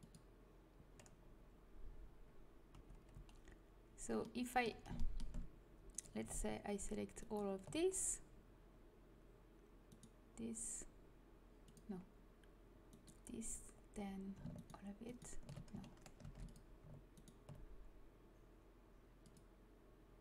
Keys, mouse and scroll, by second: 2.6 a, 3.0 a, 11.5-13.8 drag, 13.9-16.1 drag, 16.1 ctrl+a, 19.9 click.